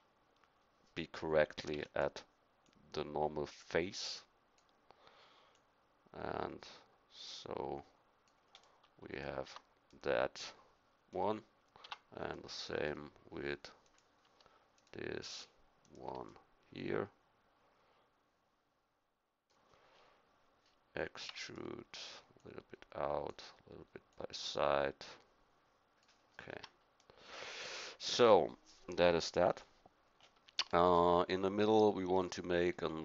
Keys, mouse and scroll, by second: 1.7 e, 2.6-4.5 drag, 5.5-8.2 drag, 8.6 middle click, 9.4 Tab, 11.8 Tab, 21.2 e, 22.3-26.0 drag, 26.5 a, 26.9 click, 29.5 KP_1.